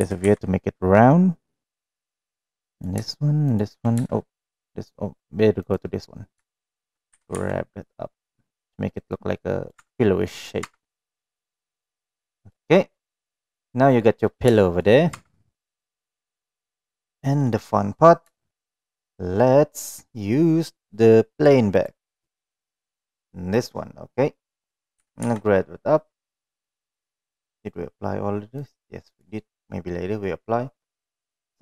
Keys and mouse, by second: 3.4 shift+click, 4.4 click, 5.5 click, 7.0 g, 9.0 middle click, 9.7 Tab, 9.9 middle click, 10.5 Tab, 10.9-12.4 middle drag, 12.9 middle click, 14.5 shift+middle click, 15.1 Tab, 15.9-16.5 middle drag, 17.4-17.9 middle drag, 18.3 shift+middle drag, 18.6 middle drag, 21.7 click, 23.1-24.5 middle drag, 25.0 g, 27.0 middle click, 27.5 click, 28.6 click, 30.9-31.6 right drag.